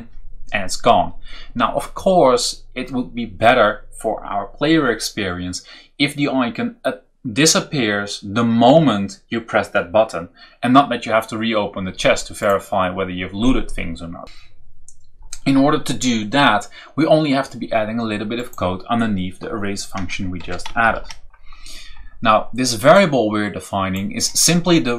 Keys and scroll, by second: 19.9 BackSpace, 20.3 Return, 20.7 ctrl+v, 21.6 v.